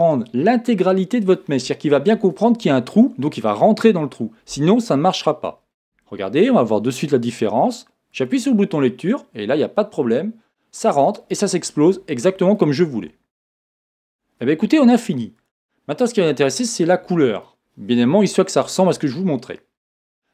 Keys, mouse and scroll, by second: 6.9 click, 8.1 click, 11.9-14.1 middle drag, 14.1 click, 15.4 click, 16.1 middle click, 18.6 KP_1.